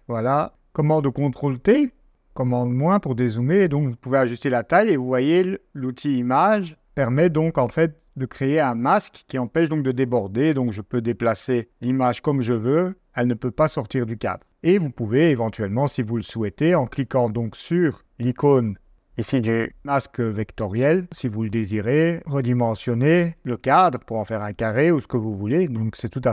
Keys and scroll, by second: 25.0 super+z.